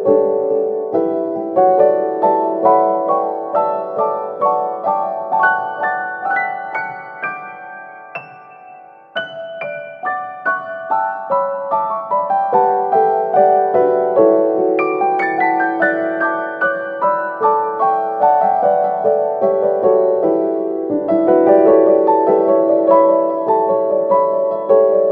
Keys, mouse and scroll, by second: 1.0-1.6 scroll up 2, 1.6-2.5 middle drag, 2.5-3.7 right drag, 3.7-6.4 middle drag, 6.4 Tab, 7.4-10.9 middle drag, 11.0 click, 11.5 click, 13.0 click, 13.6 click, 18.8 Tab, 19.5-21.6 middle drag, 21.6-22.0 scroll down 4, 22.0-23.0 middle drag, 23.0-24.7 scroll up 1, 24.7-25.0 drag.